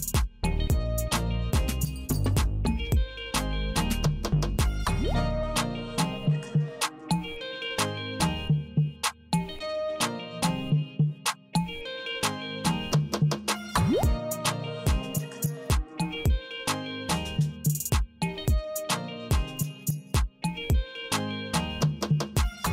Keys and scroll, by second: 0.9 w, 1.8 w, 3.0 w, 4.7 Right, 6.7 c, 8.7 Right, 10.5 w, 11.9 w, 13.0 w, 14.2 w, 20.4 Tab, 22.4 l.